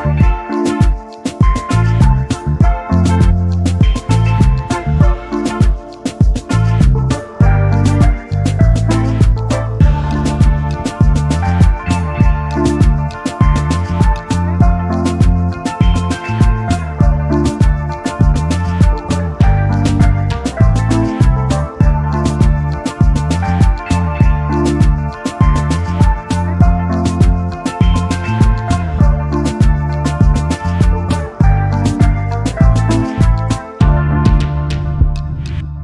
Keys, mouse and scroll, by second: 0.4 click, 1.1 click, 2.7 click, 5.3 click, 6.2 d, 6.6 click, 7.3 d, 9.0 scroll down 2, 9.6 ctrl+scroll down 2, 10.8-12.4 ctrl+shift+drag, 13.5 ctrl+g, 15.7-17.8 shift+drag, 19.0 shift+click, 20.3 ctrl+shift+g, 22.2 shift+click, 23.5 ctrl+g, 25.8 click, 26.3 click, 27.1-27.6 ctrl+scroll up 4, 28.2 ctrl+click, 29.2 ctrl+scroll down 3, 29.6-30.1 scroll up 2, 30.3 ctrl+scroll down 2, 31.1 ctrl+click, 31.9 ctrl+click, 33.8 click, 35.0 ctrl+d.